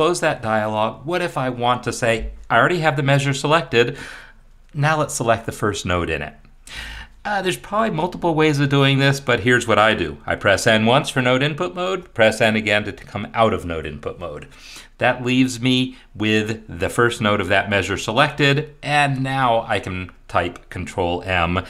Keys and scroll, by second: 10.6 n, 12.0 n, 19.0 ctrl+m.